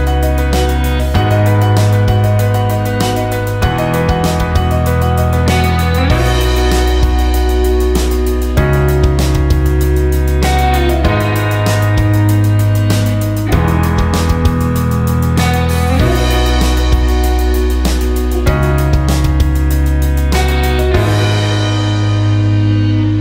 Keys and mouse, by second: 0.9 g, 4.9 click, 5.8 g, 9.4 click, 10.2 shift+click, 10.9-15.1 right drag, 15.1 click, 16.9 shift+click, 17.9 j, 20.7 click, 22.6 g.